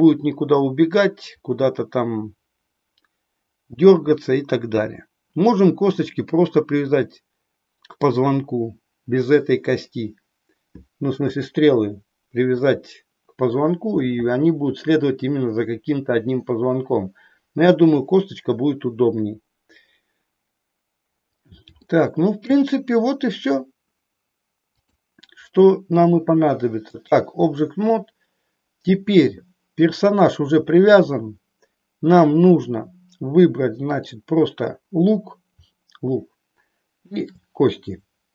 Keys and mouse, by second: 11.2 KP_1, 12.5 KP_3, 21.9 shift+middle click, 24.8-27.2 drag, 33.9 click, 36.9 shift+click.